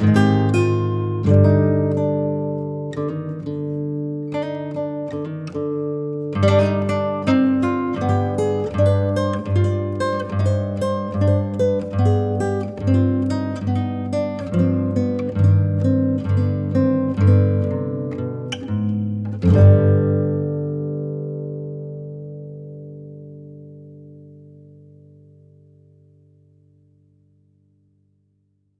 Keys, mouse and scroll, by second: 0.0-0.5 scroll up 7, 0.5 middle click, 0.8 click, 1.0 ctrl+z, 1.4 click, 1.6 ctrl+z, 1.7 f, 2.5 click, 3.0 scroll down 1, 3.1 middle click, 3.4 ctrl+z, 3.5-3.8 scroll up 3, 3.8-4.9 drag, 5.2-6.4 drag, 6.4-6.9 scroll down 5, 6.5 middle click, 6.9-7.4 scroll up 3, 7.4 click, 8.0 scroll down 2, 8.2 click, 8.5 ctrl+z, 8.8 middle click, 9.0 middle click, 9.3 scroll down 2, 9.5 middle click, 9.6-10.1 scroll up 1, 10.1 click, 10.5 click, 11.8 click, 12.7 Tab, 12.8 click, 13.0 click, 13.2 scroll down 3, 13.3 shift+click, 13.5 shift+click, 13.8 b, 15.1-16.5 drag, 17.1 shift+click, 17.1-17.5 shift+Left, 17.8 ctrl+b, 19.6-21.0 drag, 21.6 middle click, 21.7 scroll down 4, 21.8 KP_0, 22.1 Tab, 22.2 click, 22.3-26.0 right drag, 28.6-28.7 scroll down 2.